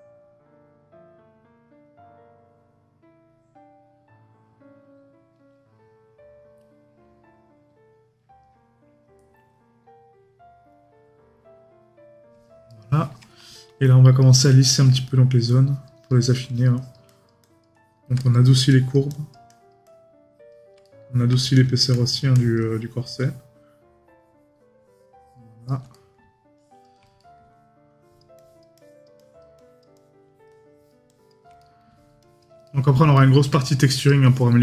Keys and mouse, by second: 12.7 right click, 14.4 right click, 18.2 right click, 20.8 right click, 25.9 right click, 27.2 right click, 31.6 right click.